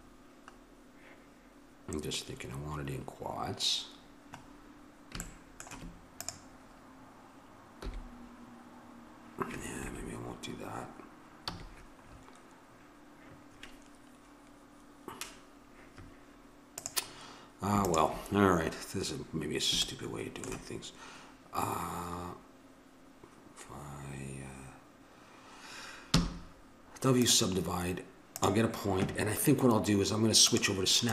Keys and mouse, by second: 5.6-6.9 right drag, 7.8 g, 11.5 a, 16.8-19.8 drag, 19.8-21.9 middle drag, 26.1 w, 28.3-29.4 drag.